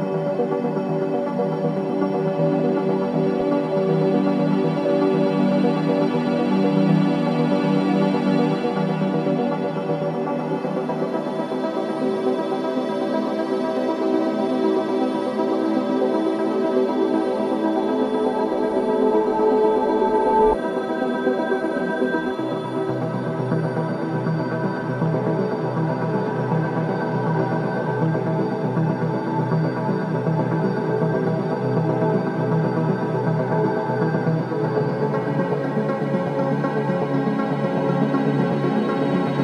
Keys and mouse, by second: 4.4 ctrl+z, 5.4 Tab, 7.7 Tab, 7.7-8.9 drag, 9.1 z, 12.9 g, 15.5 z, 17.7 g, 24.4 Tab, 25.7 click, 26.5 drag, 29.2 z, 31.8 Tab, 33.4-34.9 drag, 36.7 s.